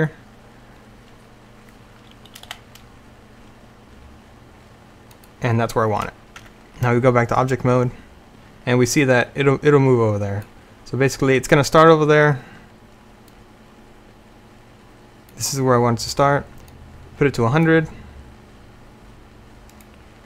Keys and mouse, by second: 2.6 g, 6.5 Tab, 12.4 middle click, 15.6-16.8 middle drag.